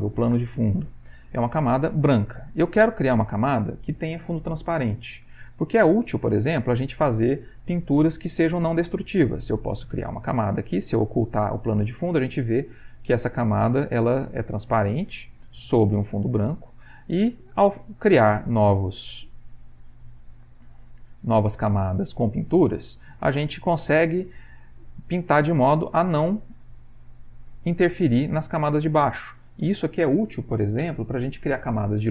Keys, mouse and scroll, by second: 6.0 click, 7.8-9.6 drag, 10.9 click, 15.6 click, 16.8 click, 18.5 right click, 19.3-20.4 drag, 20.6 click, 22.2 click, 23.2 click, 24.5-25.5 drag, 26.3 click, 26.7 click, 27.2 click, 27.6 click, 28.3 click, 28.7 click, 29.2 click, 29.6 click.